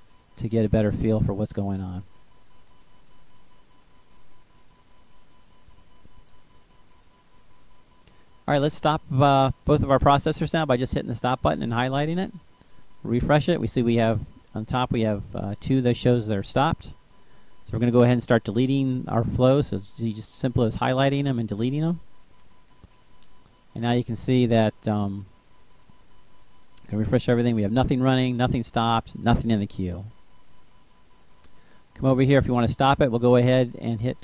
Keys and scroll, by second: 18.7 Delete, 32.5 ctrl+c.